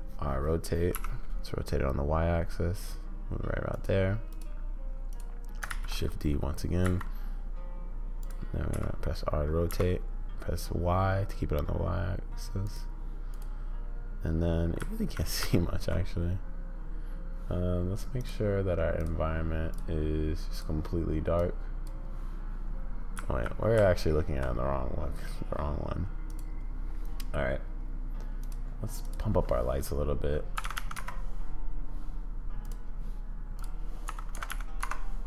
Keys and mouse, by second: 4.3 click, 5.1 click, 5.7 shift+d, 8.7 r, 13.3 click, 14.8 z, 15.4 z, 18.3 drag, 18.9 click, 20.6 click, 23.1 z, 23.7 z, 28.4 click, 29.1-31.6 drag, 30.7 0, 33.6-35.2 drag, 34.5 0.